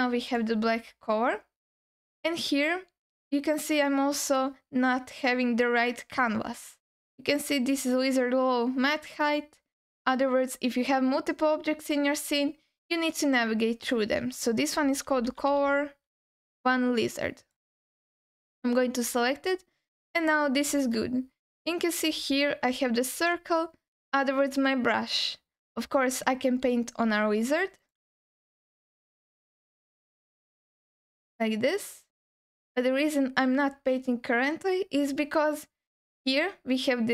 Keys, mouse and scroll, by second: 0.8-1.5 scroll down 1, 19.0-19.5 scroll up 2, 19.5-20.5 scroll down 1, 22.7 f, 23.2 f, 23.5 f, 26.7 scroll up 2, 27.0 f, 27.8 f, 27.9 f, 28.3 alt+middle click, 28.8-29.2 scroll up 2, 29.2 f, 29.7 f, 30.2 click, 31.6-32.8 drag.